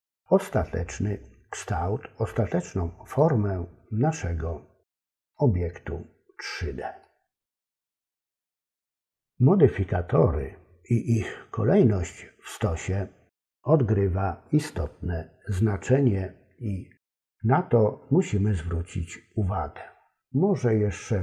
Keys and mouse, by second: 4.5 middle click, 7.0 middle click.